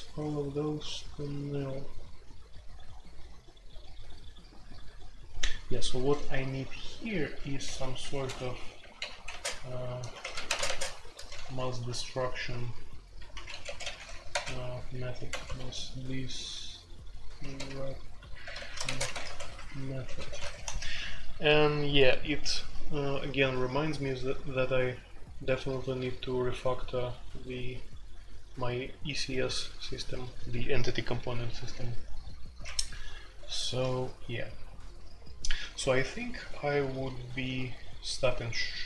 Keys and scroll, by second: 0.6 j, 1.7 k, 1.9 k, 2.1 k, 2.3 k, 5.8-7.0 typing, 8.2-11.8 typing, 13.1-15.9 typing, 17.2-20.8 typing, 32.6 Escape, 33.4 F2.